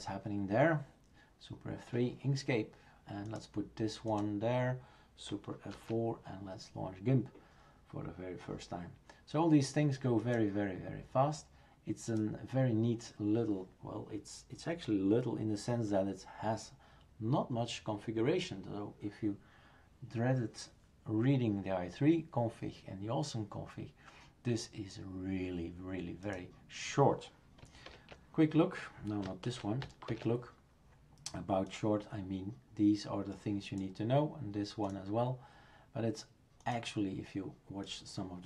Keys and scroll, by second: 5.7 super+F4, 27.9 super+Return, 29.5 shift+super+q, 30.1 shift+super+Return.